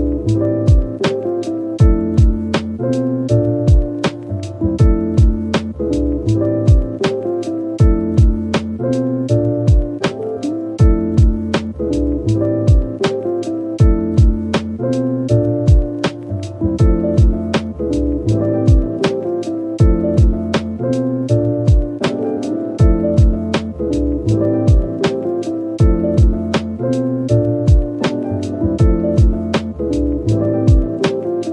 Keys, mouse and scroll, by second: 0.0-0.4 typing, 2.4-3.5 typing, 5.7 shift+click, 6.3 middle click, 7.0-7.8 typing, 8.1 click, 9.8-10.9 typing, 13.3-13.9 typing, 15.1 double click, 15.3 middle click, 16.5 shift+click, 17.3 double click, 17.7 shift+click, 22.5 typing, 23.7 Tab, 24.4-26.3 typing, 27.4 middle click, 27.9 scroll down 1, 28.6 Tab, 29.2 middle click, 30.1 shift+right click, 30.5 shift+a.